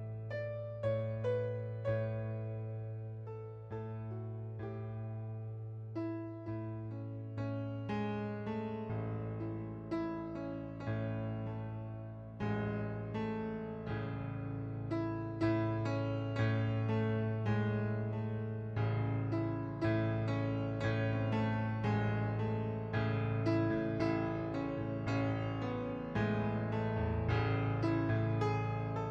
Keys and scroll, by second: 22.0 ctrl+d, 23.7 ctrl+z, 24.9 ctrl+d.